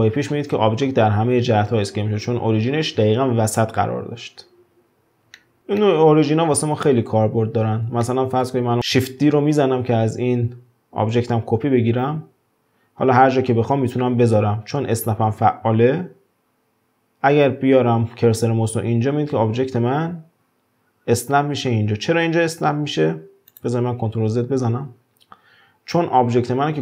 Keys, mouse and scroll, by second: 0.6 ctrl+z, 5.3-6.9 shift+middle drag, 6.9-7.5 scroll down 2, 7.5-8.0 scroll up 1, 8.0-9.6 shift+middle drag, 9.6 shift+d, 24.5 ctrl+z.